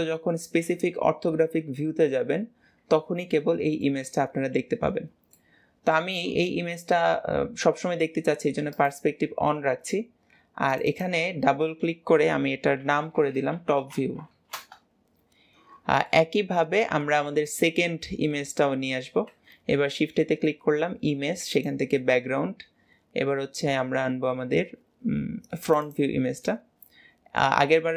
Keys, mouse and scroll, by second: 0.5 KP_7, 2.6-3.0 scroll up 1, 3.0-3.6 scroll down 1, 3.6-8.2 shift+middle drag, 8.6 click, 10.8-13.8 drag, 16.0-19.0 middle drag, 19.4 shift+a, 26.4-27.9 middle drag.